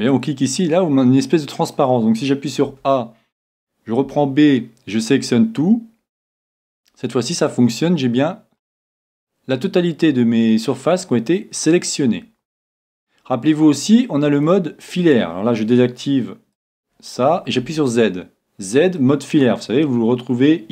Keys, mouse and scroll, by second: 0.0-1.4 drag, 1.2-3.3 middle drag, 2.7 a, 4.0 b, 7.1-9.0 middle drag, 13.5-15.4 middle drag, 16.5-18.5 drag, 17.6 z, 18.5-19.9 middle drag.